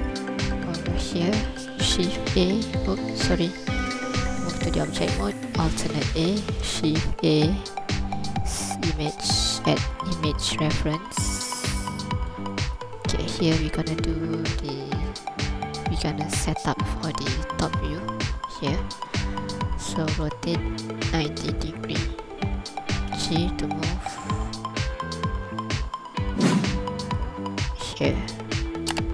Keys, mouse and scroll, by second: 0.3 scroll up 2, 1.0 ctrl+click, 2.0 shift+a, 3.9 Tab, 5.6 alt+a, 6.8 shift+a, 11.8-12.4 scroll down 2, 12.5 ctrl+click, 13.0 scroll up 2, 20.2 r, 21.1 KP_9, 21.3 KP_0, 21.6 click, 23.1 g.